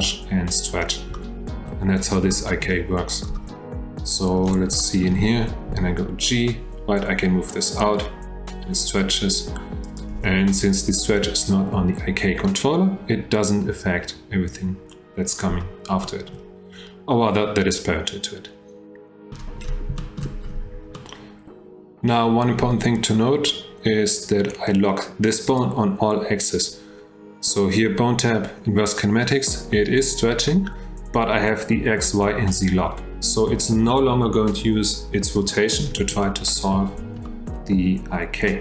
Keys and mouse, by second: 1.2-1.7 shift+middle drag, 2.3-2.7 shift+middle drag, 4.1 click, 4.8 shift+drag, 6.5 g, 16.0 shift+drag, 20.0 shift+middle drag, 20.9-22.1 middle drag, 25.5 click, 36.2-36.5 shift+drag, 37.2 shift+drag.